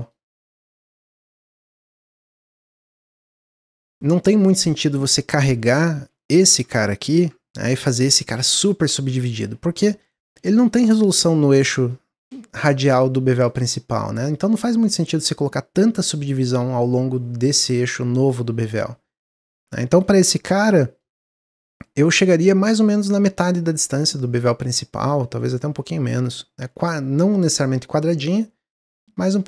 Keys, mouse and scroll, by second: 0.0 scroll down 1, 0.3-1.9 middle drag, 1.9 click, 2.2 Tab, 2.5-3.3 scroll up 1, 3.3-5.0 shift+middle drag, 5.0 ctrl+z, 5.5 ctrl+z, 5.9 ctrl+z, 6.3 ctrl+z, 7.0 ctrl+b, 8.5 click, 9.3 Tab, 9.9-14.2 middle drag, 14.2 click, 18.6 ctrl+z, 19.0 ctrl+z, 19.4 ctrl+z, 20.2 ctrl+b, 22.0-25.2 drag.